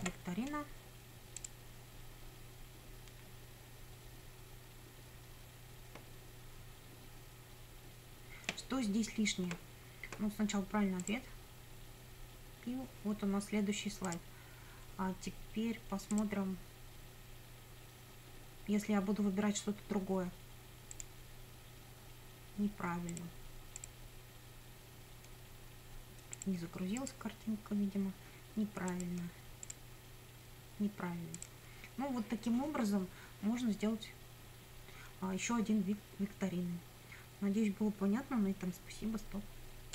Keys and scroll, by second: 0.0-0.5 typing.